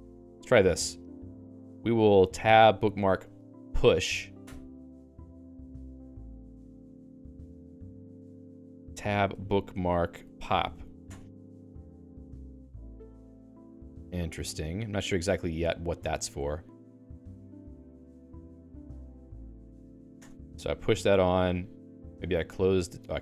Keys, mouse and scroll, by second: 0.6 click, 0.7 click, 1.2 alt+x, 2.0-4.7 typing, 7.5 alt+x, 8.8-11.2 typing, 14.9 click.